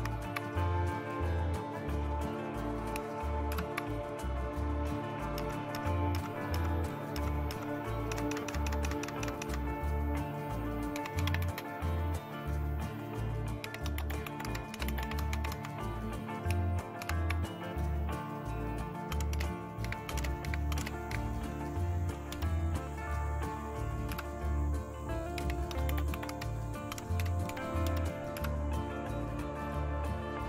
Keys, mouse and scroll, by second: 0.0 super+Right, 3.5 super+Return, 5.4 Up, 5.7 Up, 6.1 Up, 6.5 Up, 7.2 Up, 8.1 Down, 8.3 Down, 8.5 Down, 8.7 Down, 8.9 Down, 9.2 Down, 9.4 Down, 10.7-11.8 typing, 13.4-16.0 typing, 17.0 typing, 19.1-21.1 typing, 22.3 typing, 24.1 Return, 25.1-28.9 typing.